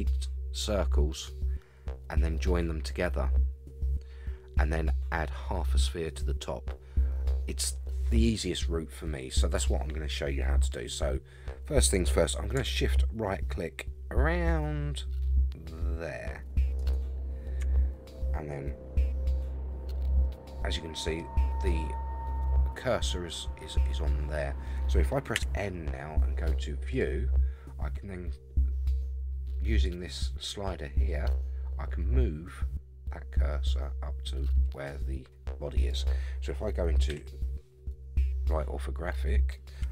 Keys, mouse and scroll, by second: 11.2-11.9 scroll up 3, 16.8 shift+right click, 19.1-19.8 scroll down 3, 20.2-21.2 middle drag, 25.3 n, 26.9 click, 29.8-35.9 drag, 37.1 KP_3, 38.4 scroll up 4.